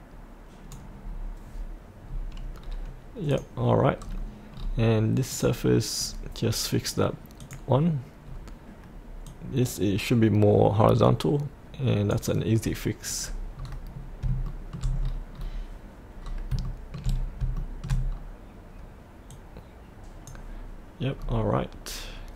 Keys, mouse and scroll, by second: 1.0 click, 2.1-2.6 scroll up 1, 3.3 click, 4.0-4.5 scroll up 1, 5.3 click, 8.3-9.3 scroll down 1, 9.3-12.2 drag, 12.6-13.2 scroll up 1, 14.4 shift+middle click, 15.0-15.3 scroll down 1, 16.6 shift+middle click, 17.2 scroll up 1, 17.6 shift+middle click, 18.1-19.3 scroll down 1, 19.3-20.4 drag, 21.1-22.3 scroll down 1.